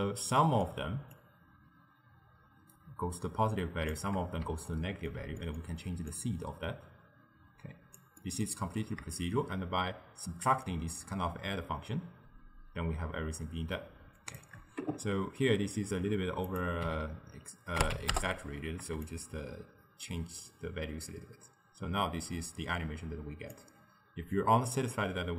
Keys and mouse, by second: 1.2-4.2 shift+drag, 4.7-6.2 ctrl+middle drag, 6.2-8.2 drag, 8.2-9.2 middle drag, 9.2-12.2 shift+drag, 16.5-22.1 drag, 24.4-25.3 drag.